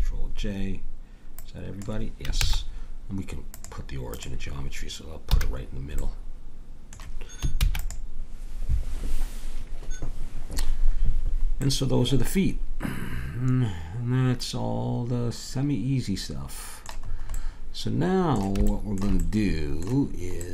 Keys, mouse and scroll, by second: 2.4 ctrl+z, 5.3 a, 7.6 ctrl+s, 17.0-20.5 middle drag.